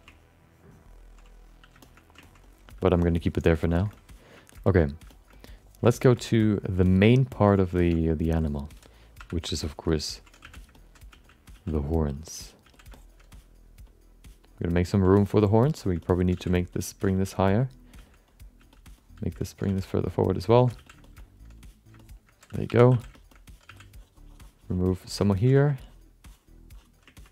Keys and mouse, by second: 0.1 ctrl+click, 1.2 click, 1.8 shift+middle click, 2.2 ctrl+middle click, 2.4 alt+middle click, 2.8 alt+shift+middle click, 3.0 middle click, 3.8 alt+shift+middle click, 3.9 alt+middle click, 4.5 alt+middle click, 5.1 alt+shift+middle click, 5.3 middle click, 5.9 ctrl+alt+middle click, 6.1 shift+middle click, 6.4 alt+middle click, 6.8 shift+middle click, 7.1 alt+middle click, 7.5 ctrl+middle click, 7.7 shift+middle click, 7.9 alt+middle click, 9.2 5, 9.6 alt+shift+middle click, 9.9 alt+middle click, 10.1 ctrl+alt+middle click, 10.4 f, 10.7 alt+middle click, 11.1 f, 12.0 click, 12.0 f, 12.6 f, 12.9 alt+shift+middle click, 13.4 click, 13.9 click, 14.4 click, 14.8 alt+middle click, 15.1 alt+shift+middle click, 15.4 middle click, 15.7 alt+shift+middle click, 16.0 alt+middle click, 16.3 f, 16.6 middle click, 16.7 alt+middle click, 17.5 f, 17.9 f, 18.3 click, 18.6 f, 19.0 click, 19.4 alt+middle click, 20.0 click, 20.0 f, 20.4 alt+shift+middle click, 20.7 f, 21.0 shift+middle click, 21.2 middle click, 22.0 alt+shift+middle click, 22.7 2, 22.9 f, 23.1 shift+middle click, 23.3 alt+middle click, 23.7 f, 23.9 click, 24.6 click, 24.9 click, 25.2 alt+shift+middle click, 25.6 f, 27.2 alt+middle click.